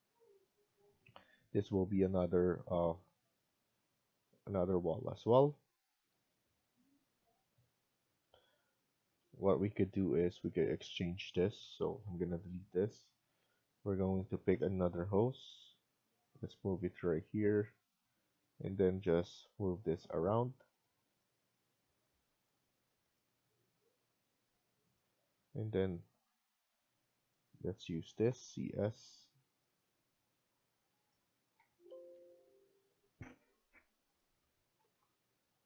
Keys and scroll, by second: 8.1 Escape, 12.0 Delete, 16.7 Escape, 22.5 Escape, 25.0 Escape, 25.2 Escape, 28.1 typing, 31.2-32.0 typing, 34.7 Left.